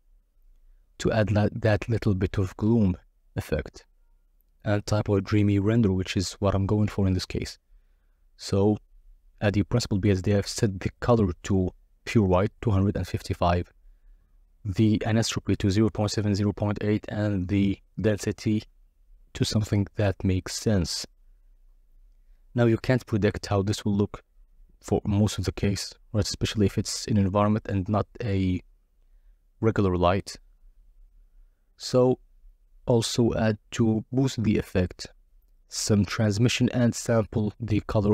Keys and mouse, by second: 0.4 click, 1.1 click, 1.3 z, 1.4 click, 1.7 z, 2.0 x, 2.2 shift+a, 4.4 click, 4.8 ctrl+shift+click, 10.8-12.0 drag, 13.4-15.2 drag, 14.8 0, 16.4 KP_0, 19.1-20.8 drag, 25.3 click, 26.3-27.7 drag, 29.9-31.3 drag, 32.8 click.